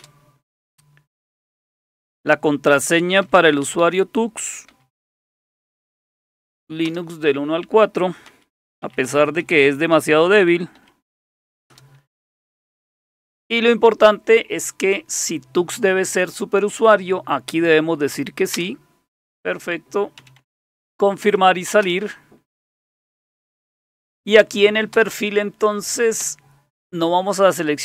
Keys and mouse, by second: 0.0 Return, 2.7-6.1 typing, 6.9 Return, 8.0-11.3 typing, 11.7 Return, 18.5 Return, 20.2 Down, 20.4 Down, 20.5 Down, 21.2 Up, 21.8 Return, 24.9 Return, 26.2 Return.